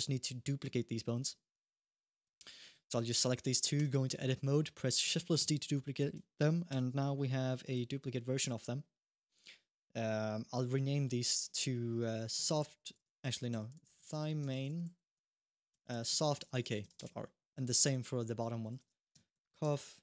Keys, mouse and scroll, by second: 0.0 h, 2.0 click, 2.7 shift+click, 3.6 Tab, 5.2 shift+d, 6.5 Tab, 7.4 click, 8.1 click, 10.4 F2, 17.7 click, 18.5 F2.